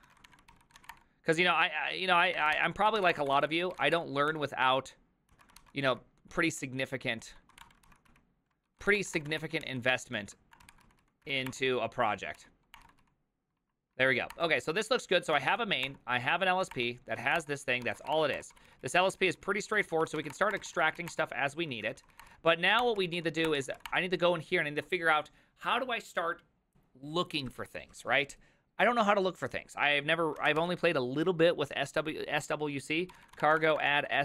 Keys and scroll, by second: 0.1 ctrl+a, 0.3-1.4 typing, 0.5 ctrl+c, 2.2 ctrl+a, 2.4-4.4 typing, 2.6 ctrl+c, 3.1 Return, 3.3 ctrl+d, 3.4 ctrl+d, 5.3 ctrl+e, 5.6 ctrl+c, 5.9-23.8 typing, 9.6 ctrl+h, 12.8 Return, 18.5 ctrl+d, 22.2 Return, 22.8 Return, 23.5 Return, 23.9 Return, 32.9-34.2 typing.